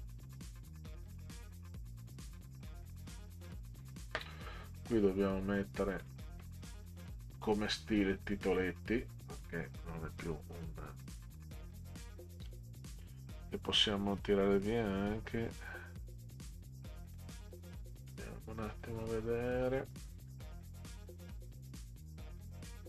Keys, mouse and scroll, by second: 1.2-3.3 drag, 6.0 click, 8.0 click, 9.3 click, 12.5 click, 18.1 click, 19.6 click, 20.3 scroll down 2, 21.2 click.